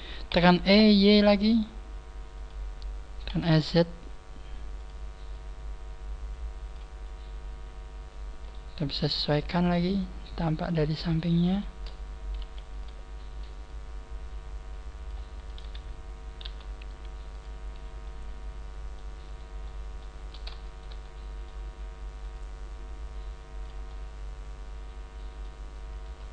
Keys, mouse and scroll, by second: 0.3 e, 3.2 5, 4.7 s, 4.8 click, 5.2 click, 7.0 middle click, 9.0 KP_1, 9.4-10.2 scroll up 2, 10.2 right click, 10.6 middle click, 11.6 shift+right click, 12.4 KP_3, 12.7 KP_1, 13.6 click, 15.3 right click, 16.4 g, 18.0 click, 18.0 middle click, 19.2 right click, 19.6 middle click, 20.6 shift+right click, 20.9 middle click, 22.2 click, 23.8 middle click, 25.8 right click.